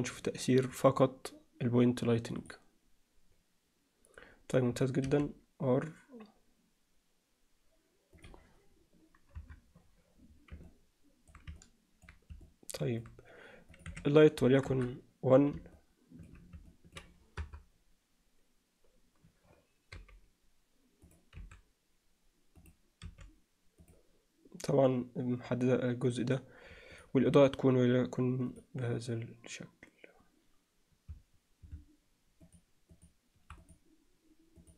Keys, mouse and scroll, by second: 0.7 click, 2.7 click, 5.1 r, 9.4 KP_3, 10.7-11.3 alt+middle drag, 11.6-12.1 alt+middle drag, 12.5-13.0 middle drag, 13.8-15.3 drag, 15.8 alt+middle click, 16.7 alt+middle click, 17.4 KP_0, 20.0 g, 21.4 s, 24.4 r, 27.0 click.